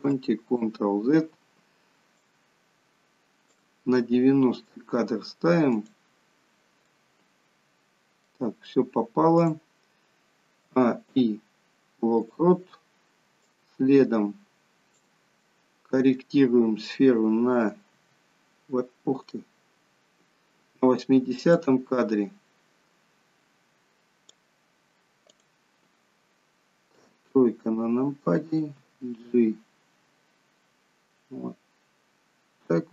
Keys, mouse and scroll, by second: 0.3 ctrl+z, 2.2 click, 4.6 middle click, 5.7 click, 6.8 middle click, 9.4 click, 10.5 a, 11.0 i, 13.4 click, 15.3 middle click, 16.2 scroll down 2, 18.0 g, 21.5 click, 25.2 click, 26.8 KP_3, 28.8 g.